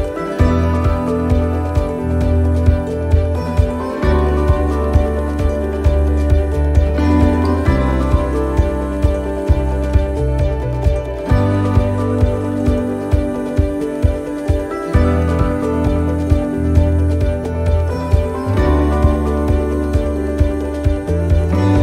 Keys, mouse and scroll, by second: 4.1 scroll down 2, 4.4 shift+middle click, 5.2 right click, 6.2 click, 11.6 right click, 12.6 click, 18.1 right click, 19.2 click.